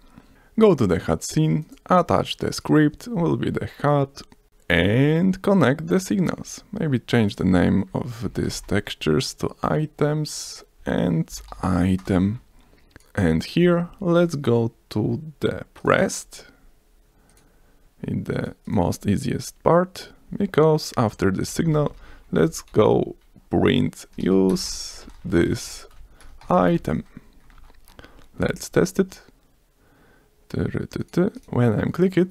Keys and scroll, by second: 4.2 ctrl+s, 8.2 shift+i, 8.5 e, 9.0 s, 11.3 shift+i, 11.6 e, 11.7 e, 12.0 Return, 12.3 ctrl+s, 21.5-22.4 typing, 24.2-28.4 typing, 28.4 F5.